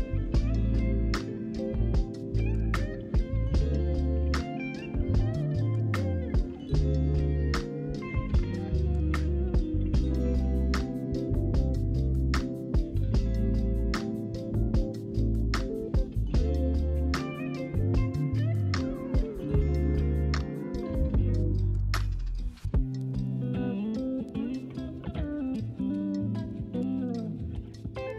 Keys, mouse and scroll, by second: 4.1 ctrl+r, 6.5-8.4 typing, 9.8-10.9 middle drag, 10.9 alt+click, 11.8 middle click, 12.6 g, 13.9 z, 14.3-18.3 middle drag, 18.3-19.2 scroll up 1, 19.6 middle click, 20.1-26.1 typing, 21.3 alt+click, 25.1 alt+click, 26.8 Tab, 27.0 right click, 27.0 middle click.